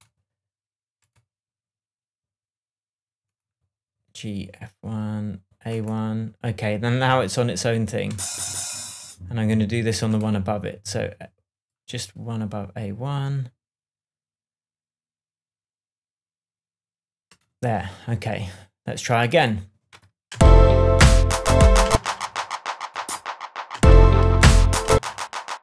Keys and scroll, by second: 20.3 space, 21.8 space, 23.7 space, 24.9 space.